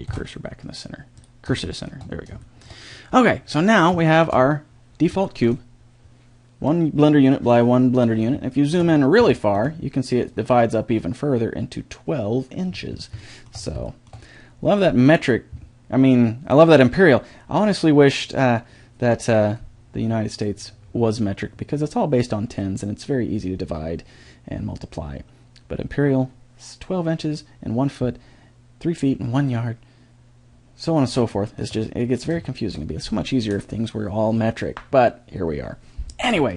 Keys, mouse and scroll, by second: 0.1 shift+s, 3.3-5.4 drag, 12.8 click, 13.4-17.0 middle drag, 32.0-36.5 middle drag.